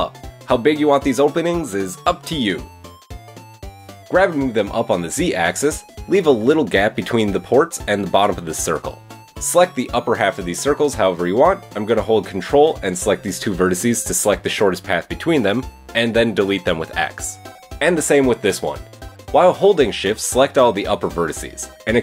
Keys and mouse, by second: 3.4 g, 13.4-13.7 drag, 14.0 ctrl+click, 15.7 x, 17.7 click, 18.3 ctrl+click, 18.5 x, 19.6 drag, 20.2 shift+click, 20.8 shift+click, 21.4 shift+click.